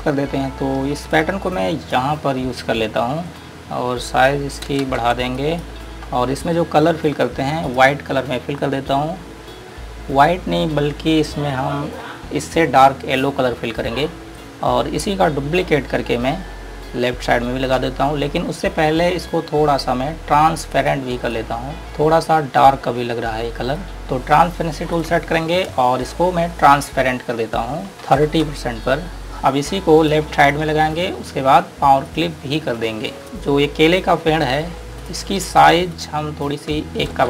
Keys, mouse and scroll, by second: 2.9-3.2 scroll up 1, 3.5 Page_Up, 5.0 space, 5.6 click, 9.8 scroll up 1, 14.3 click, 14.5 scroll down 1, 21.1 click, 23.4 scroll up 1, 24.0 click, 28.2 KP_3, 28.8 Return, 30.2 click, 30.9 scroll down 1, 32.4 click, 33.2 scroll down 1, 33.5 scroll up 1, 35.3 click, 36.2 ctrl+alt+click.